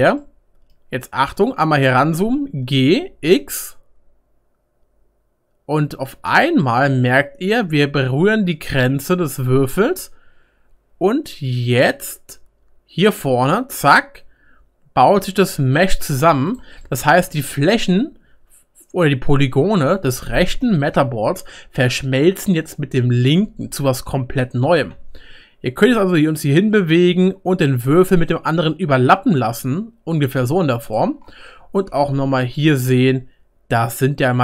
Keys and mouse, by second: 1.2-3.3 middle drag, 2.4 g, 3.3-9.9 right drag, 9.9-12.3 middle drag, 12.3-34.4 right drag, 24.6 g, 32.2-33.6 middle drag, 34.0 middle click.